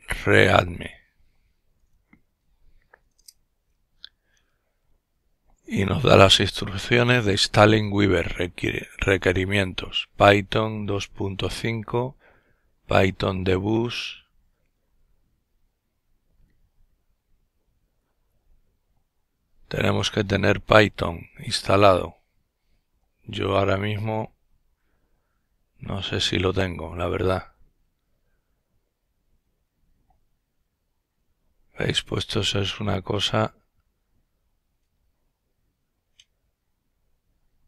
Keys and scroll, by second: 0.0-0.3 typing, 2.3 Return, 4.5 typing.